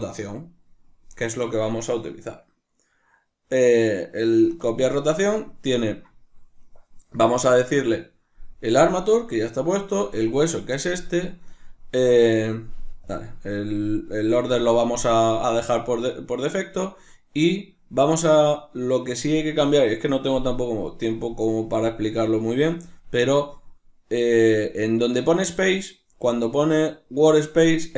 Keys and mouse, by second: 11.8-16.7 drag.